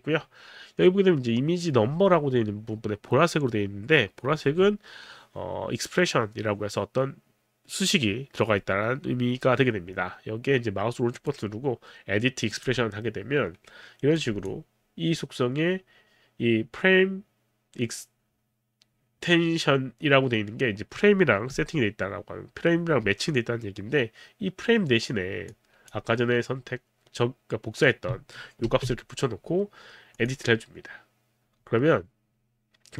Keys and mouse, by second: 11.1 right click, 12.6 click, 14.2 click, 25.5 click, 28.6 ctrl+v, 30.2 click.